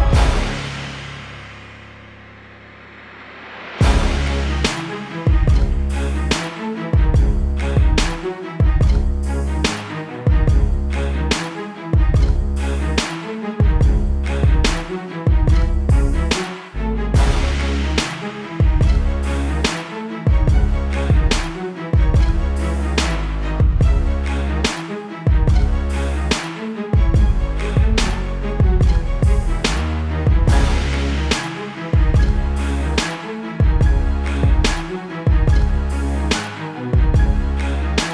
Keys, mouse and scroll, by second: 0.0-0.1 typing, 0.9 click, 1.3 space, 2.1 =, 2.5 space, 2.7 click, 3.1 space, 3.8 click, 24.2 ctrl+Num_Lock, 24.5 ctrl+z, 25.3 ctrl+shift+z, 27.4 ctrl+KP_0, 28.1 v, 28.9 click, 31.3 click.